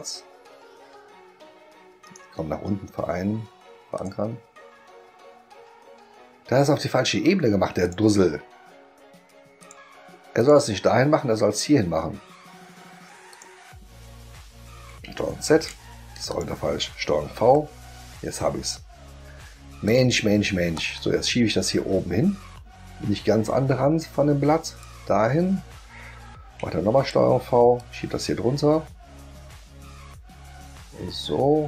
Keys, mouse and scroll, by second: 2.0 right click, 4.0 click, 7.8 click, 9.6 click, 10.4 click, 13.3 click, 15.5 ctrl+z, 16.3 click, 17.3 ctrl+v, 19.8 click, 20.7-24.8 drag, 26.9 ctrl+v, 27.7-31.6 drag.